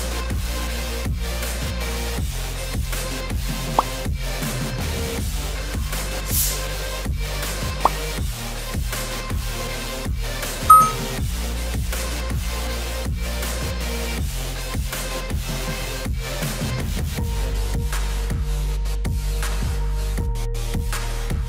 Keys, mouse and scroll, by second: 4.1-7.3 drag, 11.3-14.4 drag, 15.2-17.7 middle drag, 17.7 click.